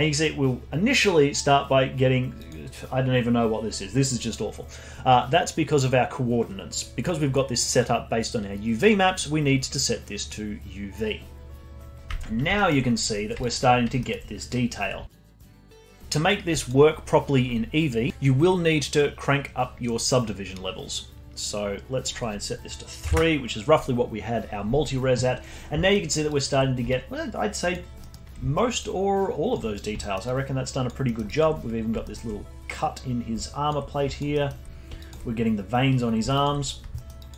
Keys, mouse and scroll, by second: 2.4 click, 3.3-4.1 scroll up 5, 4.1-5.7 scroll down 4, 5.7-6.4 scroll down 1, 6.4-8.8 scroll down 1, 8.8-11.8 drag, 12.5 alt+middle drag, 12.8-13.4 scroll up 6, 13.4 alt+drag, 13.6-14.0 scroll up 1, 14.0-14.7 alt+middle drag, 14.7-15.1 scroll down 1, 15.1-15.7 alt+drag, 15.7-16.2 alt+middle drag, 16.2-16.6 scroll down 2, 16.6-18.1 alt+drag, 21.4-24.4 drag, 25.9-26.3 alt+middle drag, 26.3 alt+click, 26.6 scroll up 3, 26.9-28.0 alt+drag, 28.0-28.8 alt+middle drag, 28.8-29.7 alt+drag, 29.7 scroll down 2, 30.0 alt+middle drag, 30.2-31.0 alt+drag, 31.0 alt+middle drag, 31.2 alt+drag, 31.5 scroll up 2, 32.0-32.4 alt+middle drag, 32.4 scroll down 2, 33.4-33.8 alt+drag, 33.8-34.3 scroll down 2, 34.1 alt+drag, 34.3-34.7 alt+middle drag, 34.7-35.9 scroll up 5, 35.0 alt+click, 35.9-36.9 scroll down 6, 36.3-36.6 alt+drag, 36.9 alt+middle drag, 37.2-37.3 alt+drag.